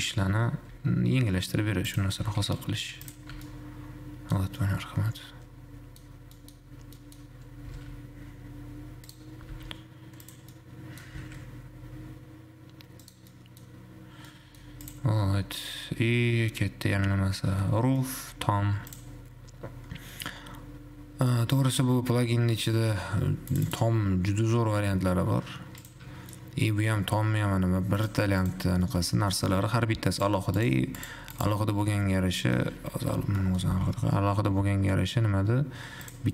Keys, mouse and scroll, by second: 1.0 s, 3.6 Tab, 3.8-6.3 middle drag, 6.3-6.8 scroll down 3, 6.8 middle click, 7.4 scroll up 2, 7.9 s, 9.8 s, 10.8 middle click, 11.3 g, 13.5-14.3 middle drag, 14.3 scroll down 2, 14.5-15.3 middle drag, 15.3 click, 15.5-15.8 scroll up 2, 18.3-19.3 shift+middle drag, 19.3-22.3 drag, 24.9 click, 25.3-26.3 scroll down 7, 26.3 scroll down 1, 26.3 `, 26.5 middle click, 27.3-28.3 scroll up 2, 28.3 click, 28.8 click, 29.3-29.8 shift+middle drag, 29.8-30.4 scroll up 1, 30.4 click, 30.8 click, 31.8 click, 32.3-33.3 middle drag, 33.3 /, 33.8-34.3 scroll up 1, 34.3-34.8 scroll down 1, 35.1-36.3 scroll up 3.